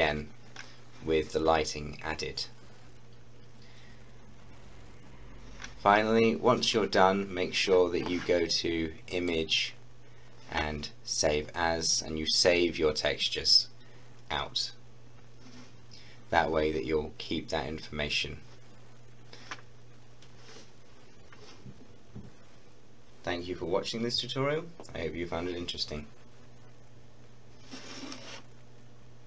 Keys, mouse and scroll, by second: 2.9-4.0 scroll up 1, 4.2-6.0 scroll down 1, 9.1 click.